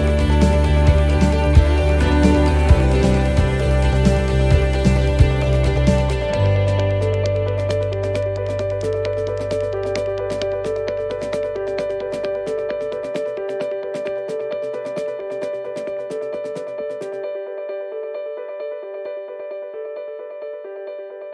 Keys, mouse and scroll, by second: 8.0 shift+right click, 8.0 shift+middle click, 9.2 shift+right click, 10.5 shift+right click, 16.1 shift+right click, 16.2 shift+middle click, 16.7 middle click, 17.7 click, 18.6 click, 19.0 middle click, 20.5 e.